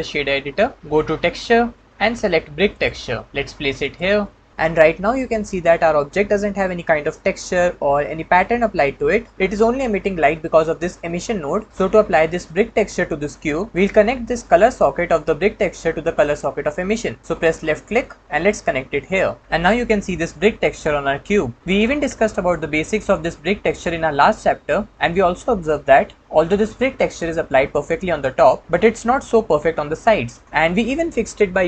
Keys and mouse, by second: 17.4 click, 17.7-19.0 drag.